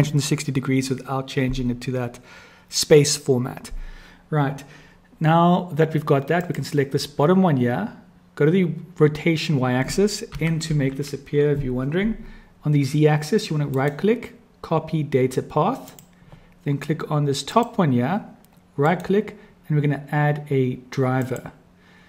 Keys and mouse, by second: 6.4 click, 10.3 n, 10.8 n, 13.8-16.1 drag, 17.4 click, 18.9-21.4 drag.